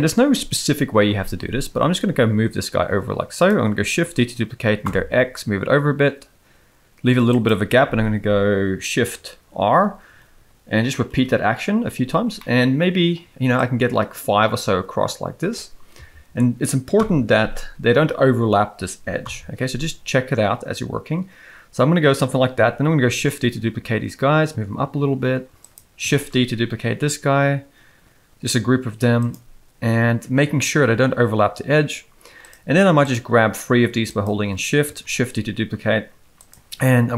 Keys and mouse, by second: 1.8 g, 4.0 shift+d, 9.7 shift+r, 10.1 shift+r, 11.1 shift+r, 12.3-13.1 middle drag, 13.5-14.5 drag, 16.9 KP_1, 19.2 KP_7, 23.1 shift+d, 33.0 shift+click, 35.0 shift+d.